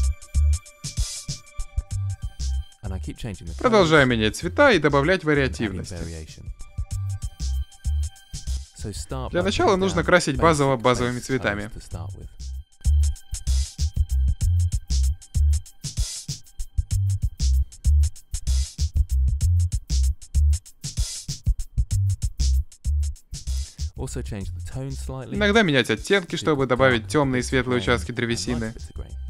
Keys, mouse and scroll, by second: 1.0 middle drag, 2.2-2.7 drag, 2.9 f, 3.1 click, 3.4-6.3 middle drag, 6.3-7.9 drag, 7.9 middle click, 8.1 click, 9.5 s, 9.7 s, 9.9 s, 10.2-10.5 drag, 10.7 click, 11.3-11.8 drag, 11.8-13.7 middle drag, 13.7 click, 14.7 shift+l, 15.2-16.5 drag, 16.7 click, 17.1 middle click, 17.4 click, 17.8 drag, 18.0 click, 18.4-18.8 drag, 18.6 s, 19.0-19.4 middle drag, 19.4-20.2 drag, 20.2 middle click, 20.4 s, 20.7 click, 20.9 middle click, 21.8 click, 21.9 middle click, 22.2 click, 22.3-22.8 middle drag, 23.1 l, 23.3-23.8 middle drag, 23.8-26.8 drag, 26.8 ctrl+z, 27.1-28.3 drag, 28.3 middle drag, 28.7 ctrl+s, 28.9 ctrl+s, 29.1 shift+space.